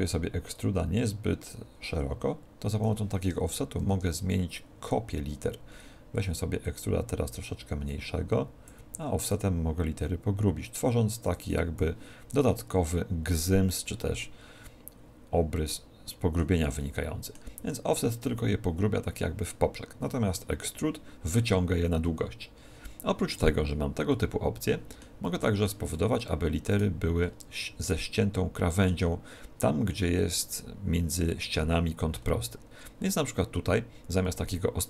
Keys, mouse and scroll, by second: 0.5 click, 3.7 shift+d, 4.2 click, 5.3 click, 6.5 click, 9.3 click, 14.1 middle click, 16.7 middle click, 24.0 middle click, 25.1 middle click, 26.7 right click, 27.1 scroll up 4, 27.7 middle click, 32.1 scroll up 4.